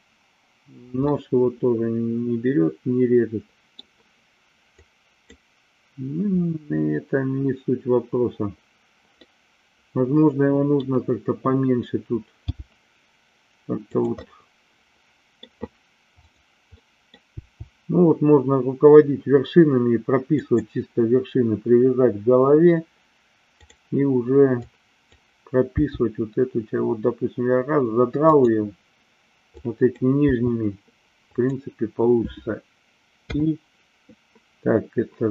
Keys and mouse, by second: 1.0-3.2 middle drag, 3.3 middle click, 4.7 click, 9.2-10.8 middle drag, 12.4 g, 13.8 click, 14.2-15.4 middle drag, 16.8 middle click, 17.3 g, 20.3 click, 23.6 click, 24.6 click, 25.7 g, 28.3 click, 29.6 click, 30.3 g, 31.3 click.